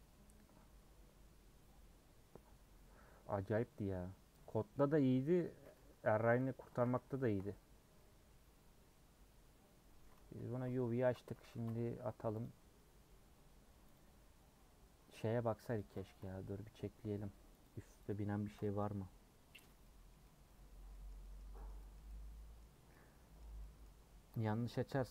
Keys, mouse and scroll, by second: 5.1 scroll up 1, 5.4 middle click, 5.8 Tab, 6.8 a, 7.2 shift+middle click, 7.6 scroll up 1, 8.0-11.3 middle drag, 11.3 Tab, 14.0-15.7 drag, 16.3 Tab, 16.4-17.6 middle drag, 17.6-25.1 drag.